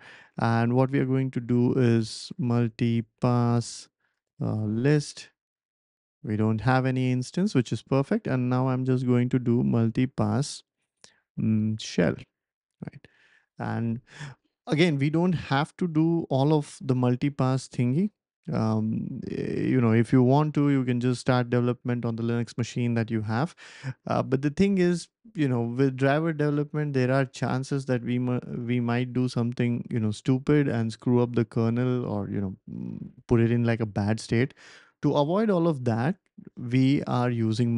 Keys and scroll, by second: 0.5-5.0 typing, 8.4-12.3 typing.